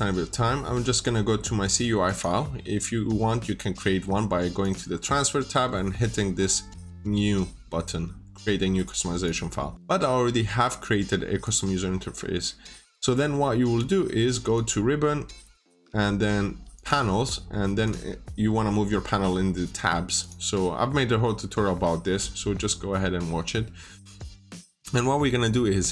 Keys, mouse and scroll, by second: 12.7 scroll down 1, 14.4 click, 20.9-23.1 scroll down 1.